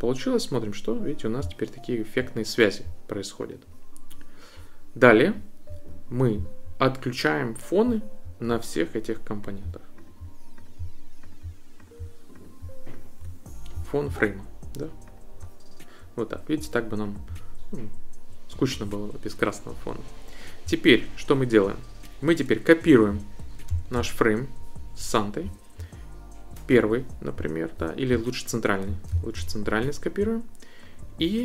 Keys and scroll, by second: 23.7 super+c, 29.1 super+c.